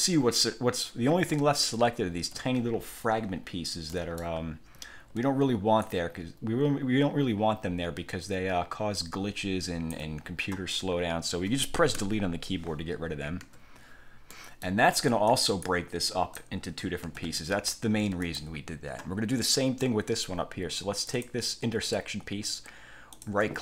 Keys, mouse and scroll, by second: 1.9-2.5 ctrl+scroll up 2, 3.5 ctrl+scroll down 2, 4.0 ctrl+click, 5.9-10.2 ctrl+shift+drag, 12.1 Delete, 13.5 1, 14.4-14.9 scroll up 2, 15.4 click, 16.1 click, 17.1 ctrl+z, 18.3 click, 21.2 click, 23.2 click.